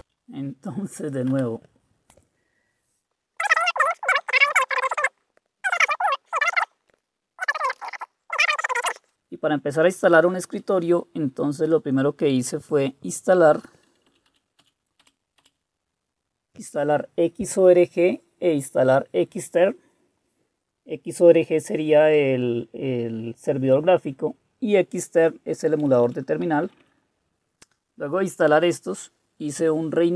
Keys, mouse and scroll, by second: 0.0 typing, 1.3 typing, 7.2-8.3 typing, 14.1 Up, 14.5 Up, 14.6 Up, 15.0 Up, 15.4 Up, 25.6 Left, 25.9 Left, 26.0 Left, 26.5 Right, 26.6 typing.